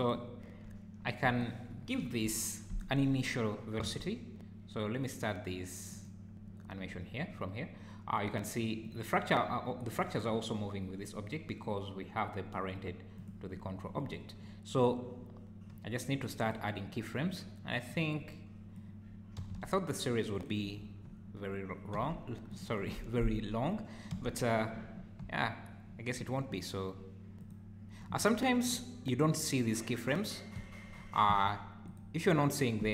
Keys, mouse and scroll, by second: 1.3 click, 2.0 KP_1, 3.8 g, 8.9 click, 13.2 click, 16.4 click, 17.9 click, 19.4 r, 21.9 g, 24.1 g, 27.4 click, 28.7 click, 31.9 click.